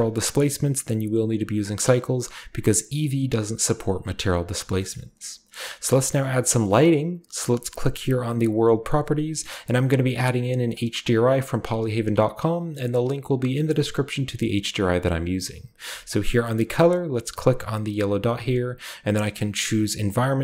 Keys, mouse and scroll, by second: 0.2 click, 1.2 click, 4.9-8.0 shift+middle drag, 8.0 click, 8.9 click, 18.0 click, 20.1 click.